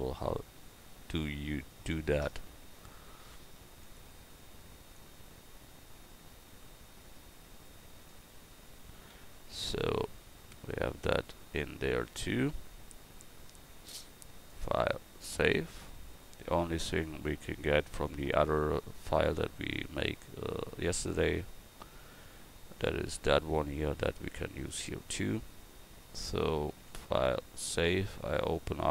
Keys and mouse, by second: 9.0 a.